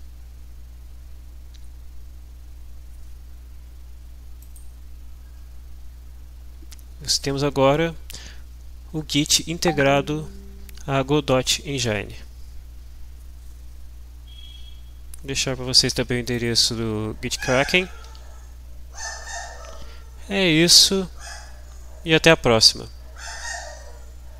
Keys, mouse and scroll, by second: 4.4-5.5 drag, 7.1 click, 16.3 click, 18.4 alt+Tab.